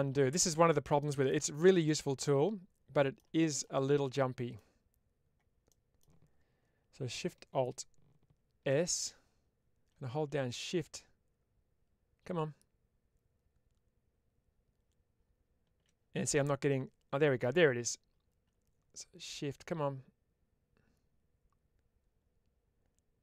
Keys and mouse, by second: 1.7-3.0 middle drag, 3.6 middle click, 5.5 middle click.